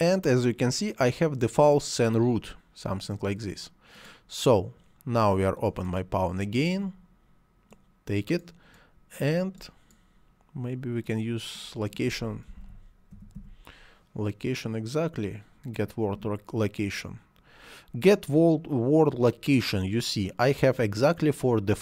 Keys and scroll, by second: 12.3 l, 12.4 o, 13.0 c, 13.2 a.